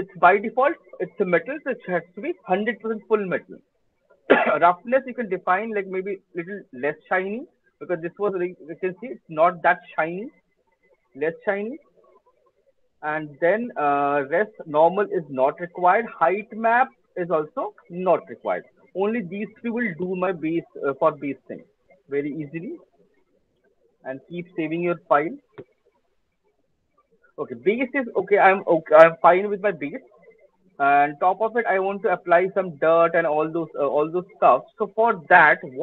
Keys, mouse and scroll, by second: 3.9-4.6 scroll, 4.6 middle click, 7.6 click, 14.9 click, 17.6 click, 22.9 click, 23.0 ctrl+s, 24.2 click.